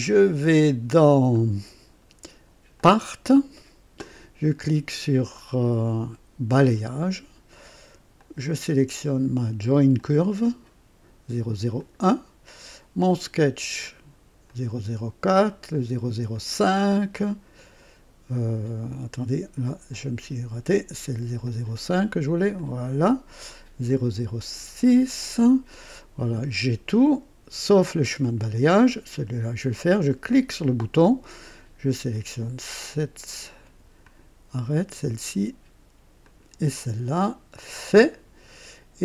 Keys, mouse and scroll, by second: 2.9 click, 6.5 click, 8.1-8.8 drag, 9.9 click, 11.7 click, 13.0 click, 14.4 click, 15.4 click, 16.3 click, 19.8 click, 21.4 click, 22.5 click, 23.8 click, 24.8 click, 30.0 click, 32.1 click, 34.0 ctrl+click, 36.2 ctrl+click, 37.7 click.